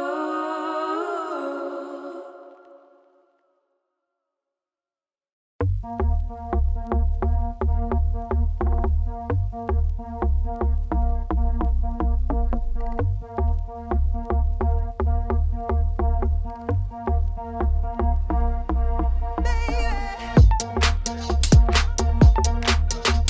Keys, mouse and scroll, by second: 2.5 middle click, 2.7 Tab, 3.3 Tab, 3.4 middle click, 3.6 ctrl+r, 4.6 Tab, 4.7 middle click, 5.3 Tab, 5.8 KP_7, 6.8 ctrl+r, 7.4 alt+click, 7.7 ctrl+b, 9.9-11.0 middle drag, 11.0 Tab, 11.1 middle click, 11.3 z, 11.5-12.9 middle drag, 13.9 Tab, 14.4 z, 14.7 1, 14.9 ctrl+r, 15.6 KP_7, 16.5 ctrl+z, 17.1 ctrl+z, 18.5 ctrl+r, 19.1 1, 20.0 ctrl+z, 20.4 x, 21.3 click, 22.0 click, 22.6 click.